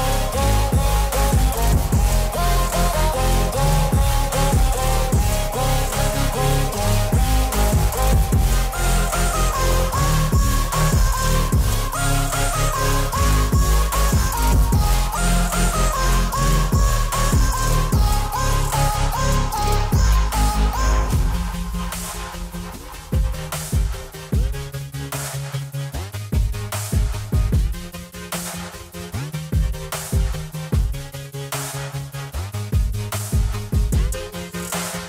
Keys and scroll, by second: 15.3 ctrl+BackSpace, 27.0 alt+w, 34.6 alt+w.